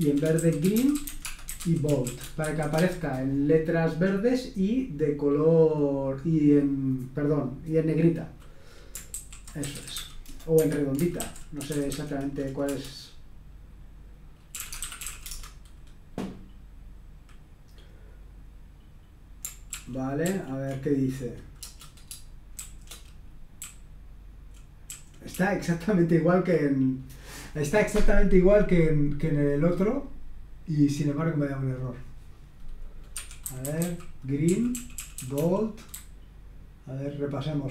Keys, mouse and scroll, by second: 0.0-3.5 typing, 8.9-12.6 typing, 10.5 Escape, 14.3-15.7 typing, 19.7 ctrl+p, 20.2 ctrl+p, 21.6 Return, 22.6 typing, 23.6-26.6 typing, 30.7 click, 31.7 click, 33.1 Escape, 33.4-37.7 typing.